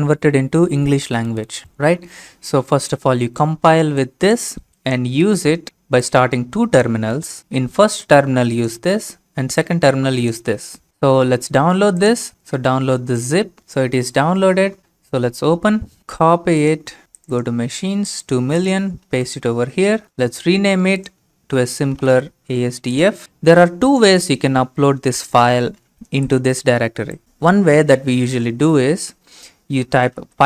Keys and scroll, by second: 16.1 ctrl+x, 19.1 ctrl+v, 21.7-22.6 typing, 29.5-30.4 typing.